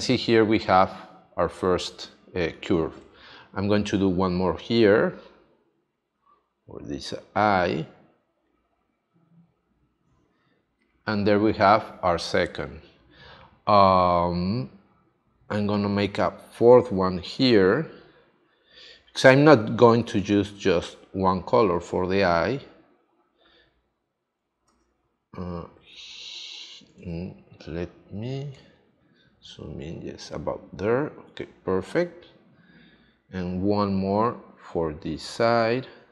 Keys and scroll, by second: 24.7 super+z, 28.1 super+z.